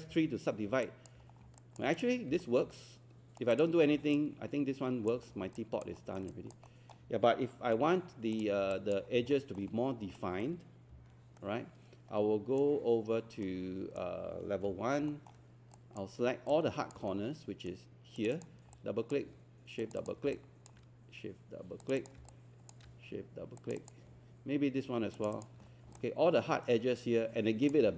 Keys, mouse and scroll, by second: 0.1 alt+3, 0.8 alt+click, 1.3 scroll down 1, 1.6 alt+click, 2.4 alt+middle click, 2.7 right click, 3.5 click, 4.0 alt+scroll down 1, 5.4 alt+scroll down 1, 6.0 alt+middle click, 6.3 alt+click, 6.7 alt+middle click, 8.0 scroll up 1, 8.4 click, 8.8 alt+click, 9.1 scroll up 1, 9.3 alt+middle click, 9.7 scroll up 1, 10.2-11.3 alt+middle drag, 11.4-13.4 right drag, 14.7 1, 15.2 alt+middle click, 15.8 alt+click, 16.5 alt+click, 17.1 right click, 18.2 click, 18.8 alt+click, 19.8 shift+click, 20.1 shift+click, 20.4 alt+click, 21.8 shift+click, 22.0 shift+click, 22.3 alt+click, 23.6 shift+click, 23.8 shift+click, 25.1 shift+click, 26.0-27.7 alt+drag.